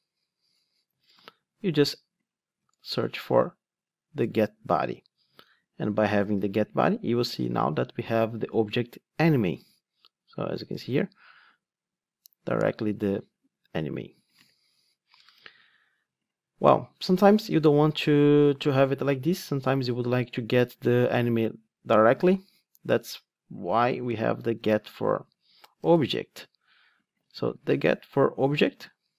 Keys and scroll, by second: 4.3 Return, 6.2 ctrl+r, 24.6 super+c, 25.9 super+v.